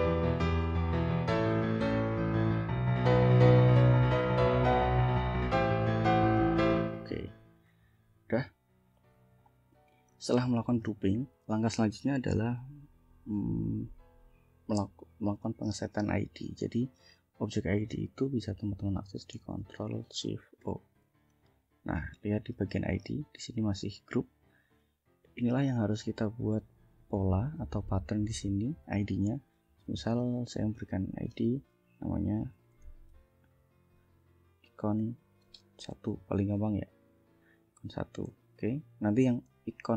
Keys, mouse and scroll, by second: 0.3 ctrl+g, 0.7 ctrl+click, 1.5 ctrl+g, 1.7 ctrl+scroll down 2, 2.1 click, 2.8 ctrl+g, 4.1 ctrl+g, 5.2 ctrl+g, 5.5 ctrl+scroll down 2, 5.8 click, 6.7 ctrl+g, 7.3 ctrl+scroll up 2, 7.8 scroll down 2, 8.4 ctrl+click, 9.2 ctrl+scroll up 2, 10.2 ctrl+scroll down 2, 15.1 ctrl+click, 16.6 click, 17.3 click, 20.7 ctrl+shift+o, 22.6 click, 24.7 click, 26.1 click, 27.2 click, 28.3 click, 29.8 click, 30.8 click, 32.3-33.6 typing, 35.0 -, 36.0 1, 38.0 ctrl+Left, 39.9 ctrl+c.